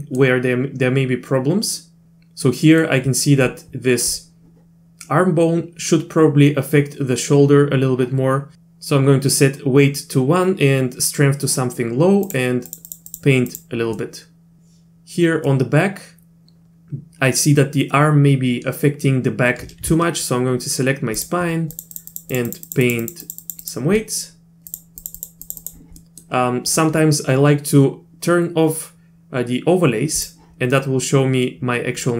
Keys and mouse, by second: 2.7 middle click, 12.2 click, 12.7 click, 12.9 click, 13.1 click, 13.5 click, 14.0 middle click, 15.5 middle click, 15.8 click, 21.2 ctrl+click, 21.7 click, 21.9 click, 22.1 click, 22.3 click, 22.5 click, 22.7 click, 22.9 click, 23.0 click, 23.2 click, 23.4 click, 23.6 click, 24.0 middle click, 24.7 click, 25.0 click, 25.2 click, 25.4 click, 25.6 click, 26.0 middle click, 30.8-32.0 middle drag.